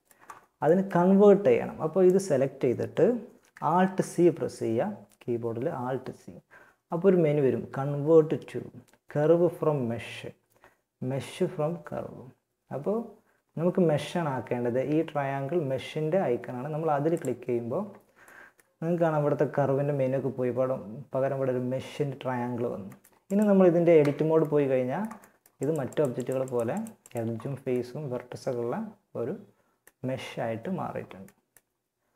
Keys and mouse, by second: 3.0 alt+c, 17.4-21.7 middle drag, 23.2 Tab, 23.8 middle click, 27.2 middle click.